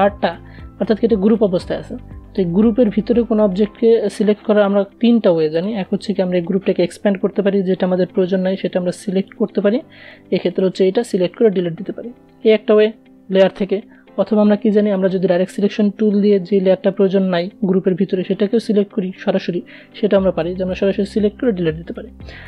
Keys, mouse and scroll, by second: 1.8 click, 3.8 click, 7.5 click, 10.0 Delete, 11.4 ctrl+z, 13.3 click, 14.2 a, 19.0 click, 20.0 Delete, 21.1 ctrl+z.